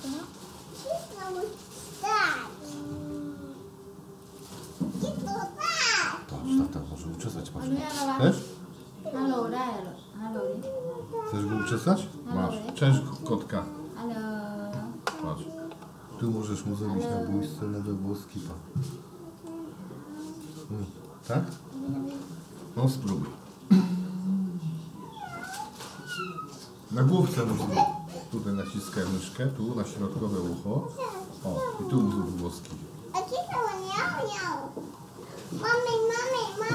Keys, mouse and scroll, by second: 1.5-2.4 drag, 4.4-5.9 drag, 6.7 middle click, 7.7 click, 8.4 click, 9.5 click, 10.4-10.7 drag, 11.2 drag, 16.3-17.1 middle drag, 17.5-17.9 drag, 18.3 click, 18.9-19.5 middle drag, 20.2 drag, 20.9 drag, 21.4 click, 24.8-25.9 drag, 26.8-27.1 drag, 27.5-27.9 drag, 28.1 click, 29.2 click, 29.5 middle click, 30.5-32.2 middle drag, 33.0-33.8 drag, 35.0 click, 36.6-36.7 drag.